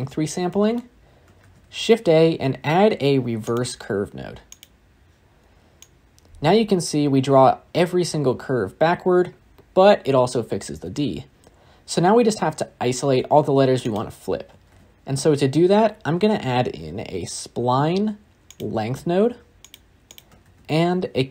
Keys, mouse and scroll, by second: 3.5 shift+a, 5.7-8.7 drag.